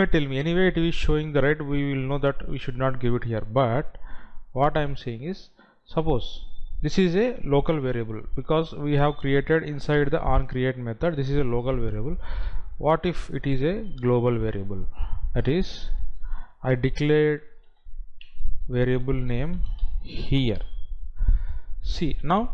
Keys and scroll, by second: 14.4 Delete, 19.3 space.